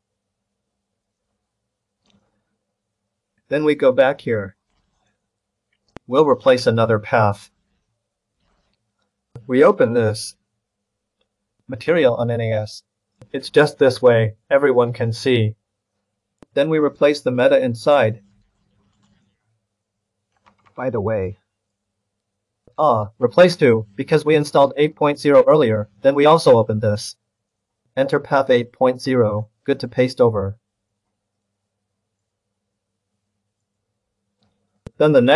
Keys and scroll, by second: 2.8 alt+Left, 20.4 ctrl+c, 29.1 ctrl+v.